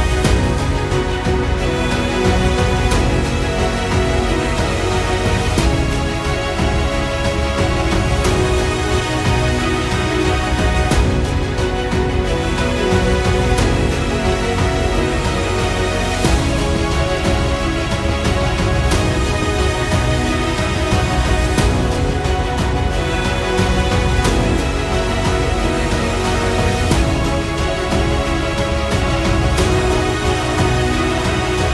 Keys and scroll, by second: 2.3 ctrl+z, 2.4 [, 2.7 ctrl+z, 7.4 ctrl+z, 7.5 ctrl+z, 9.3 ctrl+z, 9.3 ctrl+z, 10.9 ctrl+z, 11.1 ctrl+z, 11.5 ], 11.6 ], 14.6 ctrl+z, 14.6 ], 19.3 ctrl+z, 19.8 ctrl+z, 20.6 ctrl+z, 29.0 ctrl+z, 30.5 ctrl+z.